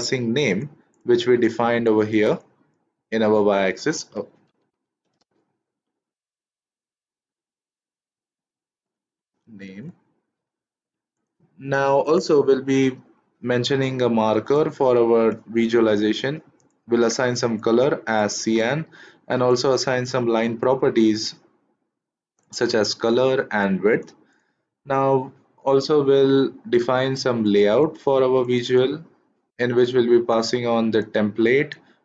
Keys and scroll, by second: 4.4 Caps_Lock, 4.6-6.9 typing, 8.8-10.3 typing.